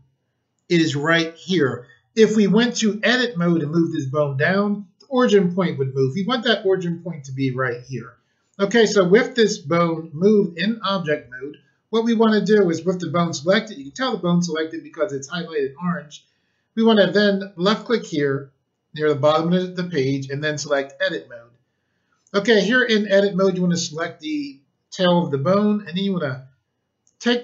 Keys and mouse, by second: 17.6 click, 20.6 click, 25.8 click.